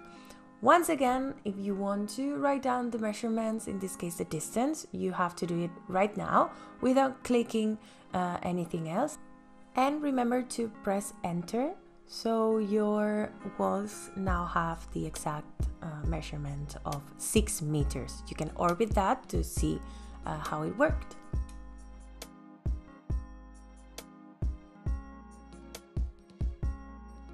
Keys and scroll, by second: 7.4 KP_6, 10.0 KP_Enter, 12.8 space, 14.7 ctrl+s.